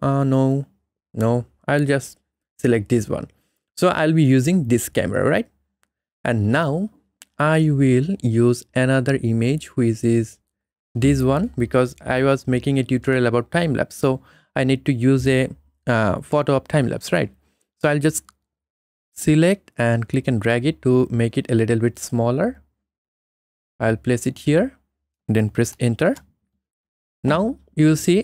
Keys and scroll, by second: 26.1 Return.